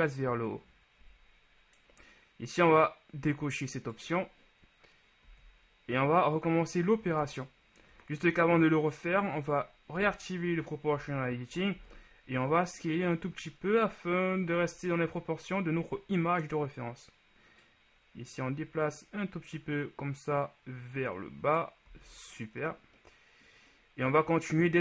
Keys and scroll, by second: 5.5 z, 10.1 i, 22.1 z.